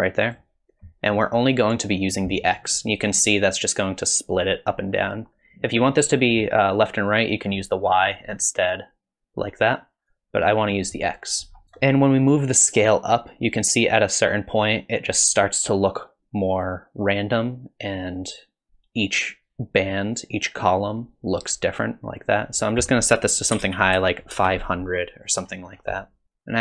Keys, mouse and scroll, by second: 7.4 click, 10.1 click, 11.5 scroll up 1, 11.6 click, 12.5 click, 22.7 click, 24.0 KP_0, 25.4-26.2 scroll down 6, 26.0 middle click, 26.2 middle click.